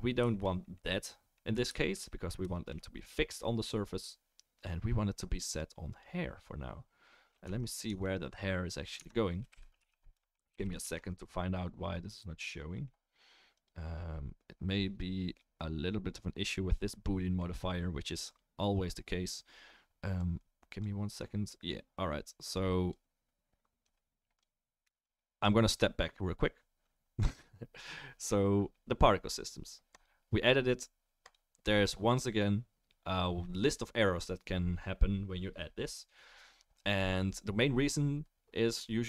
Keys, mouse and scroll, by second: 0.3-6.0 shift+middle drag, 6.0-9.5 right drag, 7.4 Tab, 7.9 Tab, 9.0 Tab, 9.5-12.8 middle drag, 9.5 a, 9.8 3, 10.5 shift+n, 10.8 Tab, 12.8-39.0 right drag, 13.5 click, 20.2-20.8 drag, 22.5-23.0 drag, 23.8-24.4 drag, 25.0-25.4 drag, 29.9 click, 31.3 click.